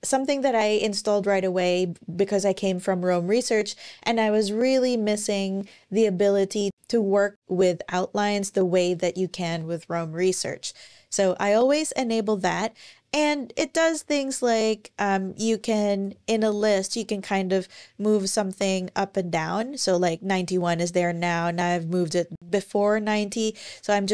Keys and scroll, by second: 13.8 ⟲, 16.6 shift+super+Up, 17.2 shift+super+scroll up 1, 21.8 shift+super+scroll up 1, 22.9 shift+super+scroll up 1, 23.4-24.1 shift+super+scroll down 2.